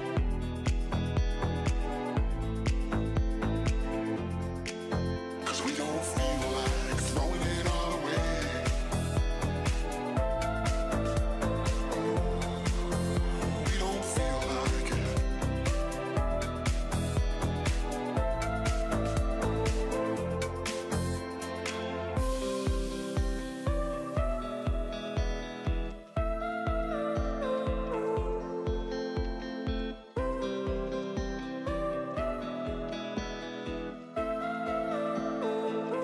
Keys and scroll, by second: 0.9 ctrl+-, 1.4 ctrl+0, 1.6 ctrl+=, 3.5 ctrl+z, 4.0 ctrl+shift+z, 5.6 ctrl+shift+n, 7.2 ctrl+z, 8.5 ctrl+Delete, 10.1 ctrl+z, 11.6 ctrl+shift+z, 14.2 ctrl+i, 21.3 ctrl+i, 22.4 ctrl+=, 24.7 ctrl+z, 27.4 ctrl+0.